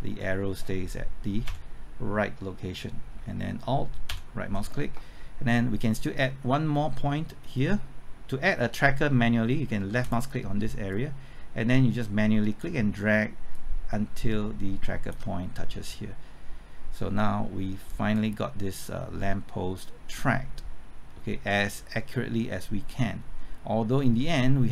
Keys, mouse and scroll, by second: 1.5 Right, 3.1 typing, 4.1 alt+Right, 10.0-13.0 drag, 13.0 typing, 13.5 shift+click, 18.2-24.7 drag.